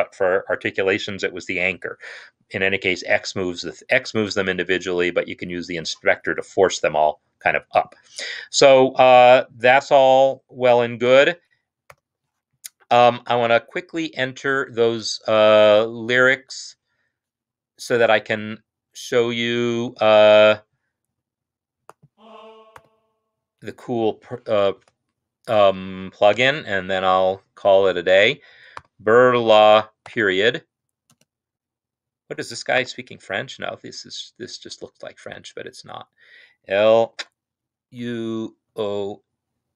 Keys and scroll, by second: 22.9 ctrl+l, 24.3-24.9 typing, 26.4 typing, 28.1-30.0 typing, 31.1 typing, 32.7-33.3 typing, 37.0-38.5 typing.